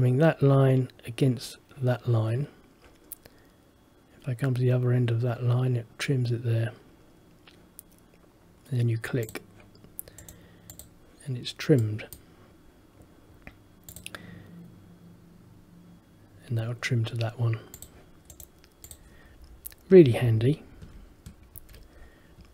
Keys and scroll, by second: 20.4 ctrl+z, 21.7 ctrl+z.